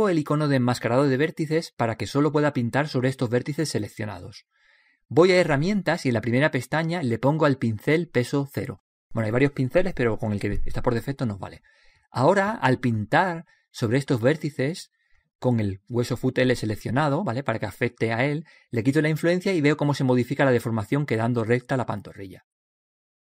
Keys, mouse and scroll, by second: 2.8-4.6 drag, 6.5-10.6 drag, 12.2-13.3 drag, 13.4-16.3 drag, 16.8-18.6 middle drag, 17.9-20.1 drag, 20.1-22.1 middle drag, 21.4-23.2 drag, 22.8-23.2 middle drag.